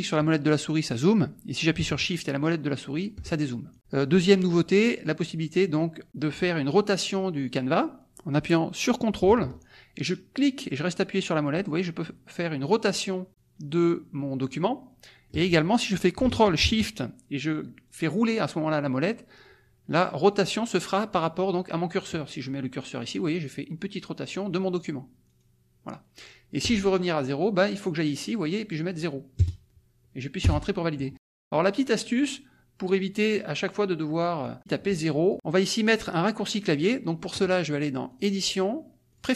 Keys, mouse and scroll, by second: 0.8 click, 2.0-3.2 shift+middle drag, 2.0 shift+scroll, 3.7 click, 10.3-15.5 ctrl+drag, 17.8-18.8 ctrl+shift+scroll down 2, 18.8-19.3 ctrl+shift+scroll up 2, 20.0-20.4 ctrl+shift+scroll down 2, 20.8 ctrl+shift+scroll up 2, 23.1-23.8 ctrl+shift+scroll down 2, 23.8-24.7 ctrl+shift+scroll up 2, 25.2-25.7 ctrl+shift+scroll down 2, 25.7-26.2 ctrl+shift+scroll up 3, 28.5 click, 29.4 KP_0, 30.5 Return, 31.4 click, 31.7-32.4 middle drag, 34.4 click, 35.2 click, 36.7 click, 38.1 click, 39.1 click.